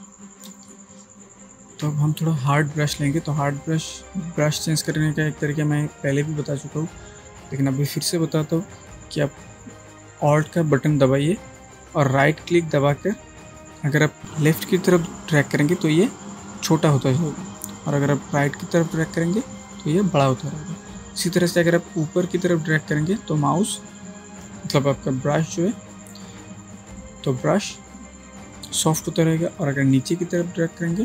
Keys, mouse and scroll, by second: 0.7 ctrl+space, 1.0 ctrl+click, 1.2-2.0 ctrl+space, 12.5-31.0 alt+right drag.